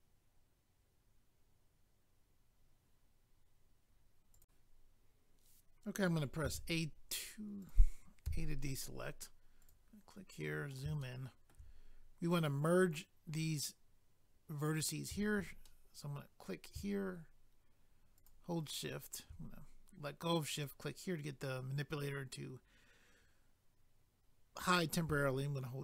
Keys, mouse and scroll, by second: 4.4 click, 7.6 click, 7.7 click, 8.3 a, 9.6 click, 9.7 click, 10.3 scroll up 1, 11.0 shift+middle click, 11.8 scroll up 1, 14.6 click, 14.8 click, 15.6 middle click, 18.2 shift+click, 18.3 shift+click, 20.5 click, 20.6 click.